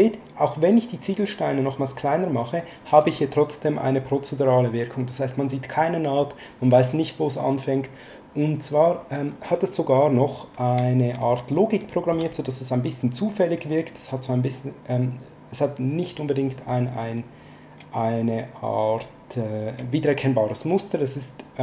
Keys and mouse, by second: 11.5 shift+middle click.